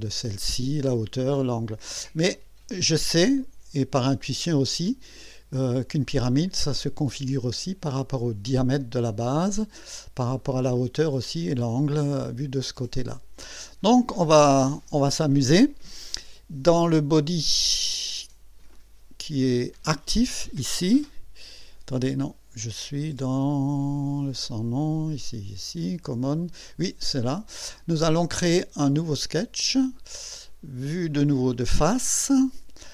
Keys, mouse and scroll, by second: 2.3-6.0 drag, 7.1-8.1 drag, 9.6-10.3 drag, 10.4 click, 12.2-13.4 drag, 29.2 click, 31.1 click, 31.9 click.